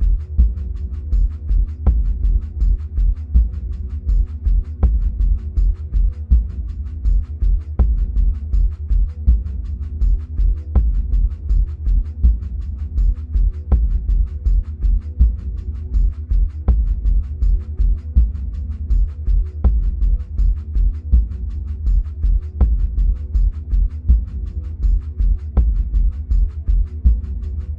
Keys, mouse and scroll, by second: 1.1 click, 3.5 click, 10.6 ctrl+z, 11.9-18.6 drag, 18.6-26.5 middle drag, 26.5-27.7 drag.